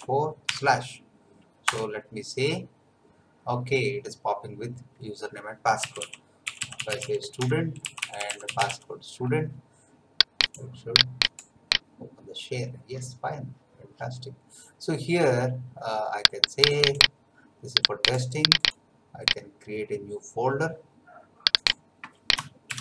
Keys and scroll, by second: 0.0-0.4 typing, 1.6 Return, 5.5-9.2 typing, 22.4-22.8 typing.